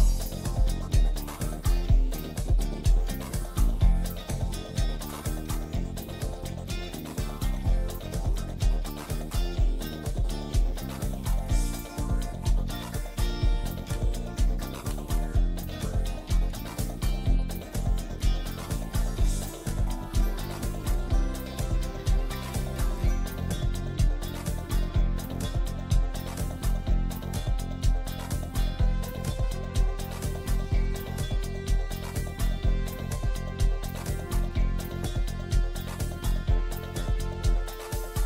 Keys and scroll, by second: 5.2 ctrl+q, 5.7 F2, 21.5 F2, 26.3 F3, 27.5 F2, 32.7 space, 32.9 F3, 33.8 alt+c, 33.9 alt+w, 34.3 p, 35.4 shift+F2, 36.3 F3.